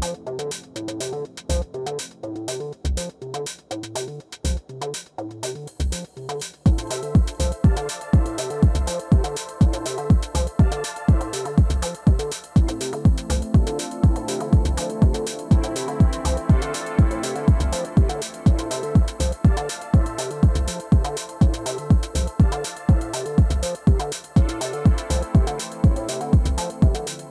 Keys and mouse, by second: 3.6-5.8 drag, 5.8 middle click, 6.1-8.0 drag, 8.0 middle click, 10.0 alt+i, 14.4 alt+m, 15.3 middle click, 16.2-18.3 drag, 18.1 middle click, 18.5 ctrl+z, 18.7 ctrl+z, 22.4-26.1 drag, 26.1-27.3 middle drag.